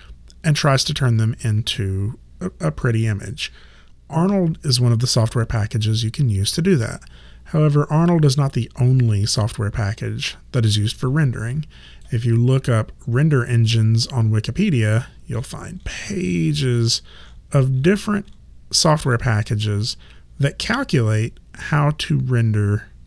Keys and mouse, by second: 9.9 click.